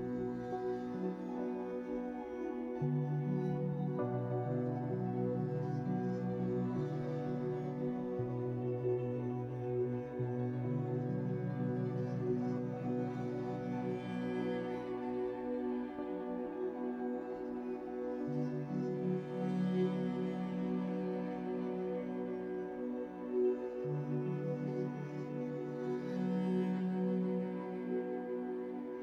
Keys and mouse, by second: 4.1 ctrl+r, 8.1 ctrl+z, 17.6 Tab, 17.6 x, 17.9 Tab, 18.7 Tab, 19.0 Tab, 19.7 Tab, 19.7 middle click, 20.9 shift+middle click, 21.9 ctrl+r, 24.5 ctrl+r, 25.1 Tab, 25.5 Tab, 26.1 ctrl+r, 27.3 ctrl+r, 28.7 Tab.